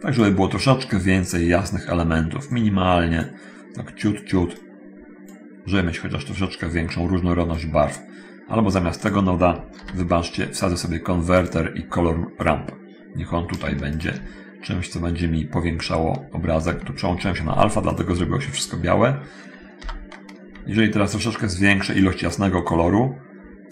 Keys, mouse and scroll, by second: 2.7 click, 4.8 click, 7.6 click, 9.1 click, 10.0 shift+s, 11.6 click, 12.5-13.9 drag, 14.1 ctrl+shift+click, 16.2 middle click, 17.7 ctrl+shift+click, 18.6 ctrl+shift+scroll up 1, 20.0 n, 21.5-23.0 drag.